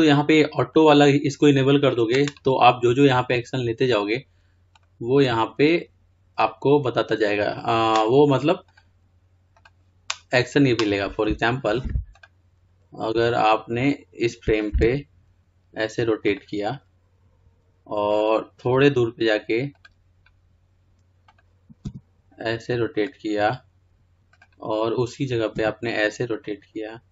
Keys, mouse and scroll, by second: 1.9 click, 18.4-23.1 drag, 23.1 r, 24.8 click, 26.5 r.